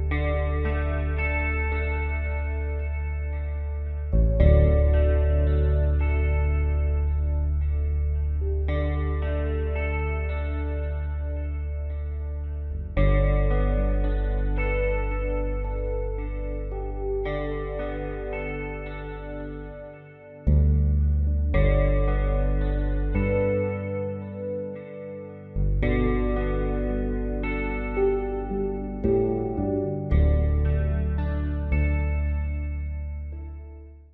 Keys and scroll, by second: 30.3 Delete.